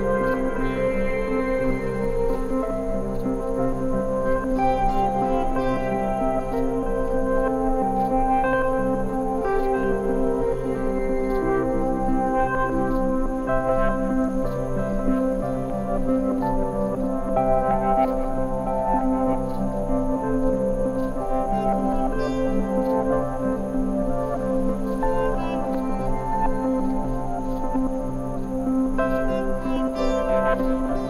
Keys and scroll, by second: 1.6 super+c, 5.9 Right, 6.4 Return, 7.2 v, 13.5 super+t, 19.2 Return, 27.2 super+z, 30.0 i.